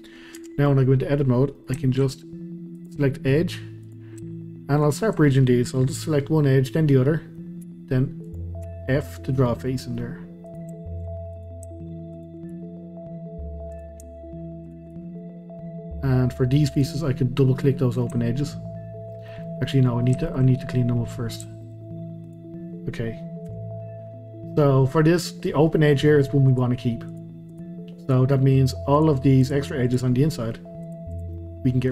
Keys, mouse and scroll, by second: 0.4 Tab, 0.7-1.6 scroll up 1, 1.6-2.8 shift+middle drag, 2.8 click, 3.1 middle click, 3.8 click, 4.8 shift+click, 6.9 middle click, 7.6 r, 8.6 f, 9.1-10.4 middle drag, 10.4 click, 11.3 click, 12.1 shift+click, 12.5 f, 13.7 click, 14.6 shift+click, 14.9 f, 15.2-16.6 middle drag, 16.6 click, 16.8 click, 17.1-20.5 middle drag, 20.5-21.2 scroll up 2, 21.2 scroll down 2, 21.4 middle click, 22.2 click, 23.5 KP_Decimal, 24.1-24.6 scroll down 1, 24.8-26.5 middle drag, 26.5 click, 27.1 click, 27.5 click, 28.0 click, 28.4 middle click, 28.9 click, 29.4 click, 29.9 click, 30.1 middle click, 30.8 click, 31.1 click, 31.3-31.9 middle drag.